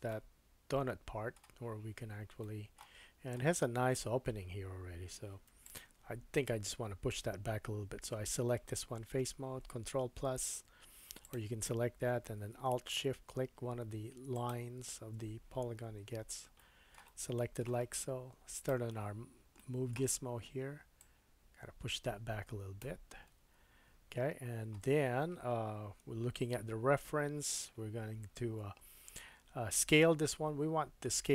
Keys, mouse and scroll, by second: 0.1 middle click, 2.4 middle click, 3.0-5.4 scroll up 1, 5.5 3, 5.6 click, 10.0 ctrl+KP_Add, 11.2 click, 14.3 alt+shift+click, 16.6-18.5 shift+drag, 16.6 shift+middle click, 17.1 middle click, 18.5-21.0 middle drag, 19.9-21.0 scroll up 1, 21.0 click, 23.4 Tab, 24.3-26.0 scroll down 3, 26.0 KP_1.